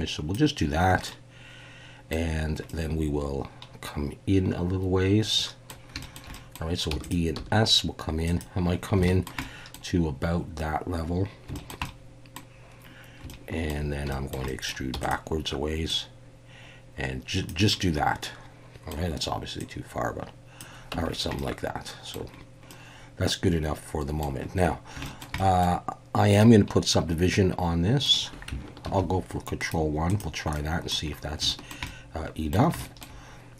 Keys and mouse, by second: 1.1-2.1 middle drag, 2.7-5.7 middle drag, 6.0 shift+middle click, 6.3 middle click, 6.9 e, 7.3 s, 8.2 click, 9.0 shift+middle click, 9.4 middle click, 11.5 shift+middle drag, 11.8 middle click, 13.3 shift+middle click, 14.1 shift+middle click, 14.5 middle click, 14.9 e, 15.0-17.5 drag, 18.2 middle click, 19.6 click, 20.9 Tab, 21.4-22.1 middle drag, 22.7-24.2 middle drag, 25.0 shift+middle click, 25.4 middle click, 26.4-28.0 middle drag, 28.9 ctrl+1, 29.6 right click, 30.5-30.9 middle drag, 31.5 shift+middle drag, 31.9-32.5 middle drag, 32.8 shift+middle click.